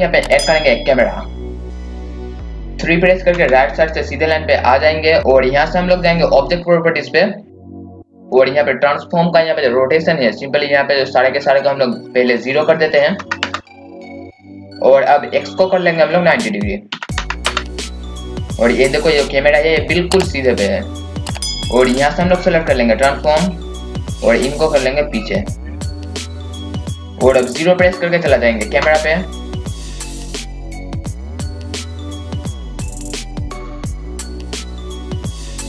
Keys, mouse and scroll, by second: 1.3 click, 3.3 KP_3, 7.5 click, 13.6 KP_0, 13.8 click, 13.9 KP_0, 14.3 click, 14.4 KP_0, 15.9 click, 17.8 KP_0, 18.8-20.8 scroll up 1, 20.8-21.3 scroll down 1, 21.3 scroll up 1, 23.7 click, 26.0 KP_8, 26.4 click, 28.7 KP_0, 29.7-31.3 drag, 32.4 click, 33.1 KP_0, 33.5-35.6 drag.